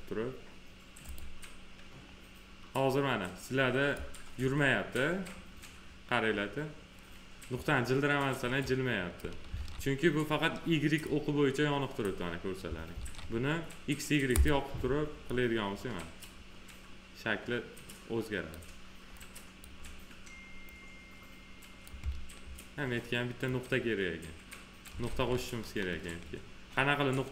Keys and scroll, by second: 9.4 ctrl+z, 12.9 ctrl+z, 25.0 ctrl+z.